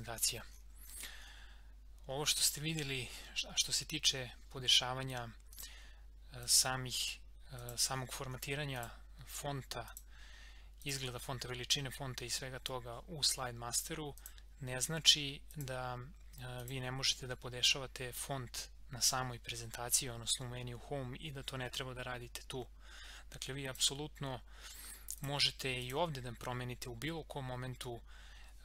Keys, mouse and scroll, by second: 5.5 click, 8.0 scroll up 1, 8.8 click, 14.1 click, 23.6 click.